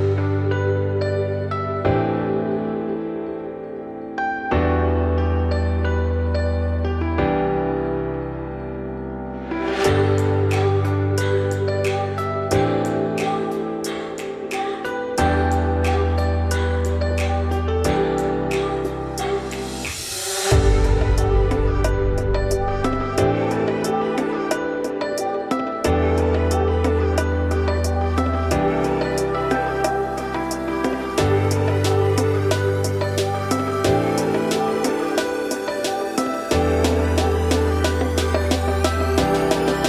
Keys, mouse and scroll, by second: 6.7 click, 7.1-14.5 middle drag, 14.5 click, 14.9 scroll down 2, 15.0-15.4 middle drag, 15.4-15.8 scroll up 2, 16.7-18.5 drag, 25.2 click, 29.3-30.8 drag, 32.7-33.9 scroll down 8, 33.9-34.6 middle drag, 34.6-35.0 scroll up 1, 35.0 `, 35.7 scroll down 2, 36.0 shift+middle drag, 36.3-37.3 scroll up 7, 37.3-38.0 shift+middle drag, 38.0-38.7 scroll up 4, 38.7 scroll down 3.